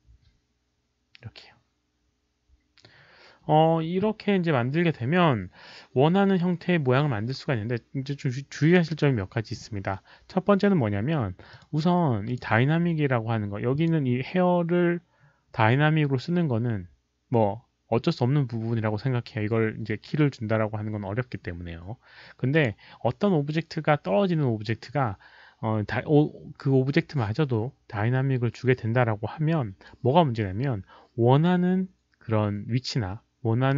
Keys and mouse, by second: 0.4 click, 11.5 click, 12.2 click, 13.7 click, 22.5 click, 24.5 click.